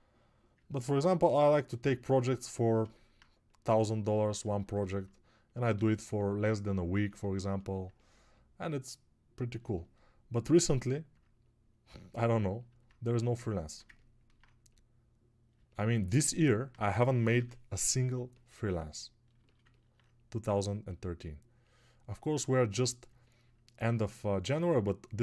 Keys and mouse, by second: 9.6-10.8 alt+drag, 9.6-10.8 alt+right drag.